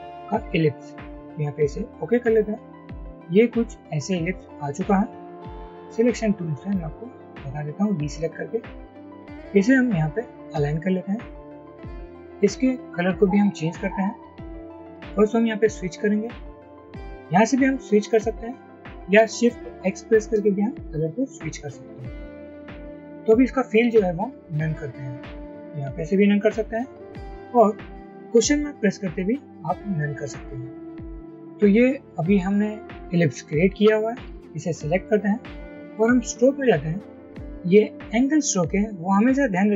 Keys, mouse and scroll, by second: 20.4 typing.